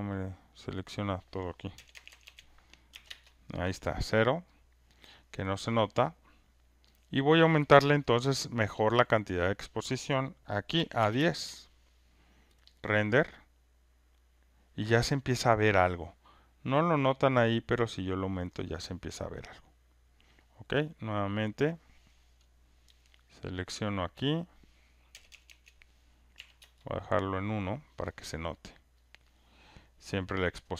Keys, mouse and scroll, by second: 0.2 click, 0.3 click, 1.7-4.1 typing, 3.1 Return, 4.5 click, 7.0 click, 9.4 click, 10.5-12.1 typing, 12.7 click, 18.5 click, 21.5 click, 23.8 click, 25.1 BackSpace, 25.3 BackSpace, 25.5 BackSpace, 26.3 1, 26.6 Return, 29.1 click.